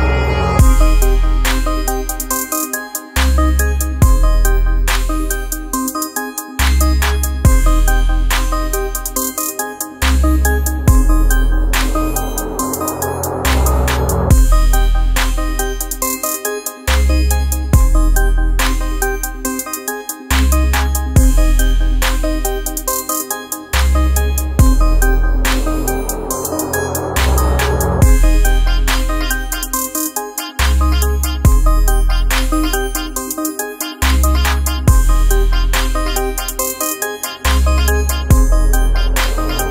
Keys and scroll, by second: 16.0-16.7 typing, 17.3 ctrl+z, 20.3 ctrl+z, 22.9 ctrl+z, 23.1-23.8 typing, 28.4 x, 30.6 ctrl+z, 32.2 ctrl+x, 34.9 ctrl+z.